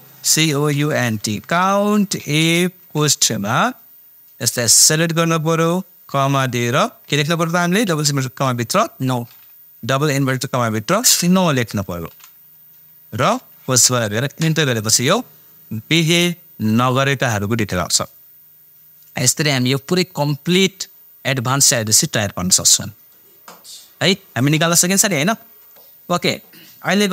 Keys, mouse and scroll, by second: 0.0-2.8 typing, 4.6-6.4 drag, 6.4-7.9 typing, 10.7 typing, 12.1 shift+', 13.2 shift+0, 16.2 click, 17.4-18.7 scroll up 1.